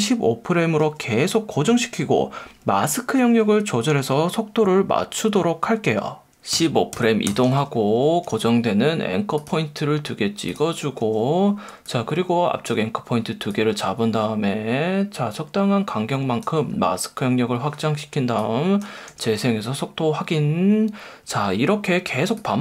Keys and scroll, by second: 0.8 F1, 6.5 shift+Right, 8.2 F1, 11.0 F1, 19.1 space, 21.3 space.